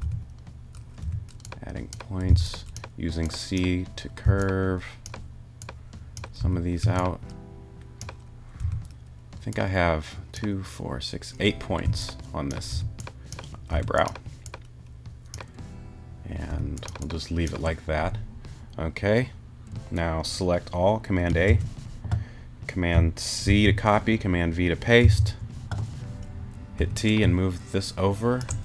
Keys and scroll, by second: 0.0 super+t, 2.3 c, 4.2 c, 6.4 t, 6.8 a, 8.6 t, 11.8 c, 12.7 t, 16.5 t, 21.5 super+a, 23.5 super+c, 25.0 super+v, 26.8 t.